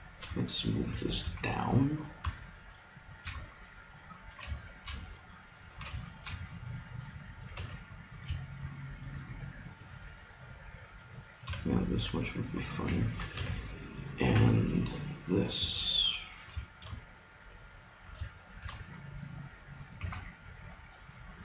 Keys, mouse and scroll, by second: 1.3 g, 3.5-7.9 middle drag, 7.6 g, 11.7-12.7 drag, 12.8 a, 13.1 click, 13.4 b, 14.3 g, 20.0 g.